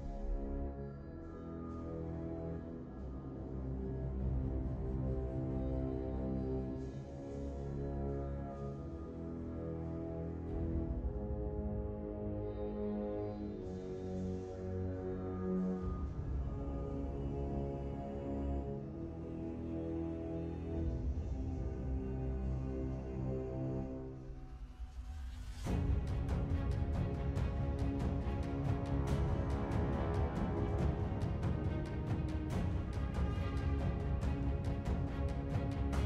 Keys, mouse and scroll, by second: 12.7-13.8 scroll up 3, 13.8-14.2 scroll down 3, 15.1 scroll up 2, 16.4-17.4 scroll down 3, 17.4 scroll up 2, 18.9 scroll down 2, 19.7 scroll up 2, 20.5-21.8 scroll down 4, 21.8 scroll down 1, 22.0 scroll up 3, 22.5-23.4 scroll down 2, 34.0 1, 34.3 Return.